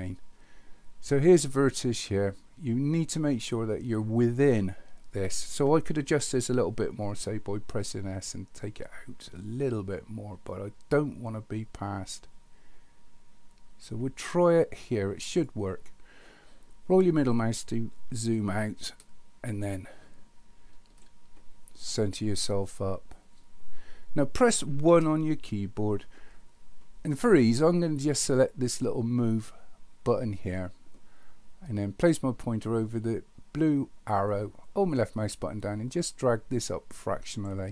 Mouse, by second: 18.3-20.9 middle drag, 30.4 click, 34.6-37.4 drag.